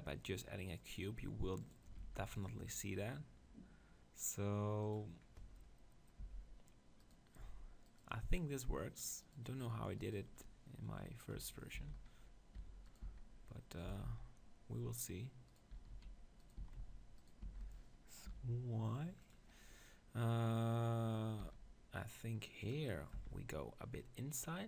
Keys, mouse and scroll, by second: 1.7-3.6 drag, 2.0 ctrl+r, 5.3 middle click, 5.7 middle click, 6.2 z, 7.0 click, 7.4-11.8 right drag, 11.4-13.9 typing, 15.6-19.2 right drag, 15.7 s, 16.6 s, 17.4 s, 19.3-21.4 drag, 21.4 s, 22.7-24.4 drag, 23.2 z.